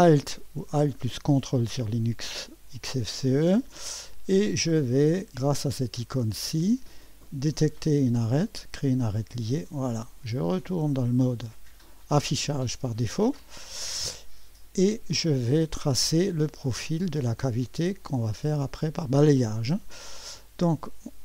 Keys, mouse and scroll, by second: 1.2 ▭, 1.6-3.6 drag, 7.2 click, 9.0 click, 11.4 click, 13.2-14.4 right drag, 14.4-17.3 scroll up 1, 17.6 click, 18.8-19.9 scroll up 1, 19.2 right click, 19.3 middle click, 19.9-21.2 right drag.